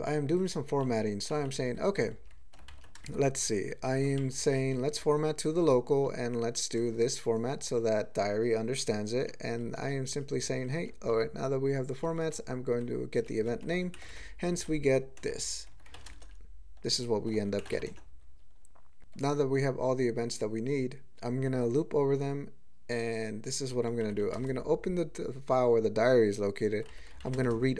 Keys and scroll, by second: 0.2 ctrl+n, 0.8 ctrl+p, 1.3 ctrl+n, 1.8 ctrl+g, 2.2 ctrl+p, 2.7 alt+m, 3.0 ctrl+space, 3.7 ctrl+g, 4.2 alt+m, 4.6 alt+f, 4.9 alt+f, 5.2 alt+f, 5.5-6.1 alt+f, 6.8 alt+b, 6.9 alt+b, 7.4 alt+f, 8.8 alt+f, 9.2 alt+f, 9.5 alt+f, 9.7 alt+f, 10.1 alt+f, 10.3 alt+f, 10.5 alt+f, 10.8 alt+f, 11.0 alt+f, 11.9 alt+f, 12.7 ctrl+f, 13.1 ctrl+f, 14.6 typing, 15.9 alt+m, 16.1 ctrl+space, 17.2 ctrl+g, 19.0 ctrl+n, 24.0 ctrl+n, 24.2 ctrl+n, 24.4 ctrl+space, 26.6 ctrl+g, 26.9 ctrl+n, 27.2 alt+m, 27.4 ctrl+space.